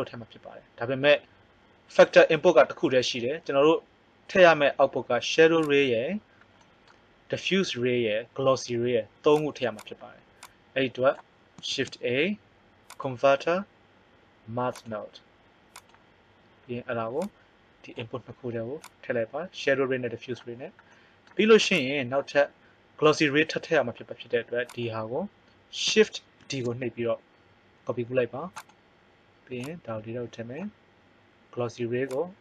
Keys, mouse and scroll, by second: 5.6 click, 9.3 click, 10.5 click, 11.6 shift+a, 17.2-20.7 drag, 20.7 middle click, 21.7 click, 26.4 shift+d, 29.6-30.6 drag.